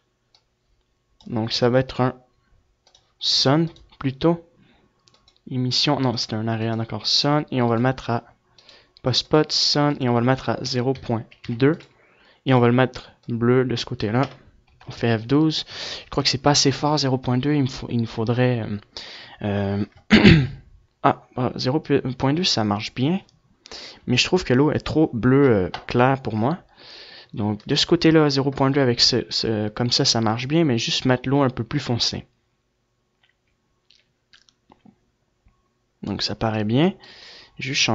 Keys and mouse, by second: 0.3 click, 2.0 r, 3.5-12.2 drag, 14.7 KP_0, 37.0 F11.